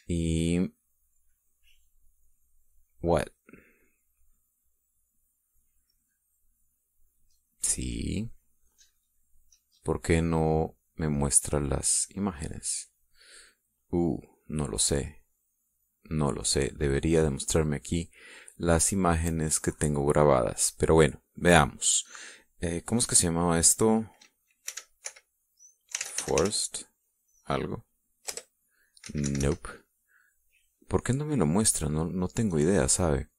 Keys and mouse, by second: 6.4 click, 7.3 click, 10.5 click, 11.8 click, 16.2 click, 17.1 click, 17.5 click, 25.5-27.2 typing, 29.2 Return, 29.9 Escape, 32.2 click.